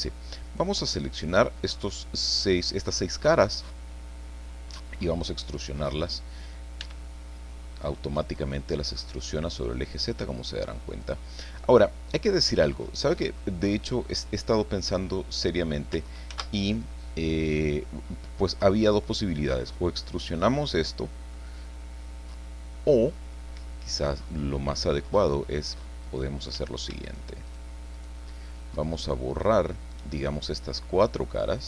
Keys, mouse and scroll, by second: 0.5 shift+right click, 1.0 shift+right click, 1.8-3.1 shift+middle drag, 3.5-4.9 middle drag, 6.8 e, 11.0-13.4 drag, 16.3 ctrl+z, 17.6-20.7 drag, 20.7-21.3 scroll up 2, 21.3-23.4 drag, 23.4 middle click, 23.6 click, 26.0 right click, 27.0 shift+right click, 27.4 shift+right click, 27.9 shift+right click, 30.1-31.6 shift+middle drag.